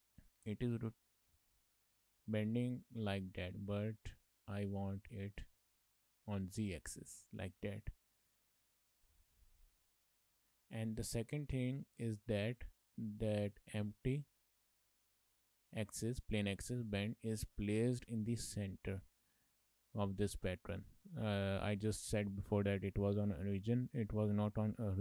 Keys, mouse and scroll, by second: 0.5 middle click, 1.6 middle click, 4.3 click, 4.7 click, 5.2 middle click, 6.0 middle click, 9.4 middle click, 10.4 shift+middle click, 10.6 middle click, 11.0 shift+middle click, 13.3 click, 14.3 shift+middle click, 15.0 middle click, 16.9 shift+middle click, 17.1 middle click, 17.7 scroll up 2, 18.1 middle click, 20.2 shift+middle click, 20.5 middle click, 21.7 shift+middle click, 22.3-22.7 scroll down 1, 22.7 shift+middle click, 23.0 middle click, 24.0 shift+middle click.